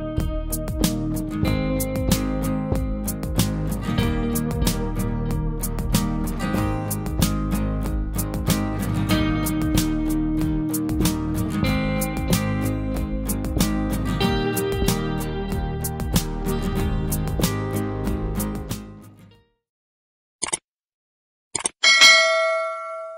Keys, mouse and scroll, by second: 3.5 click, 3.5 typing, 3.5 click, 6.1 typing, 7.1 click, 7.1-11.2 typing, 12.1 Return, 14.3 typing.